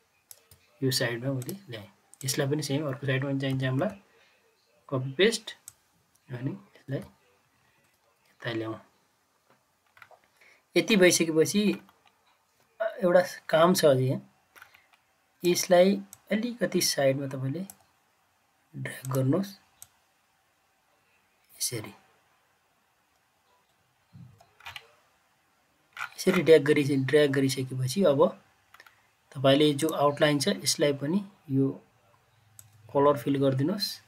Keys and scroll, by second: 3.4 ctrl+c, 3.7 ctrl+v.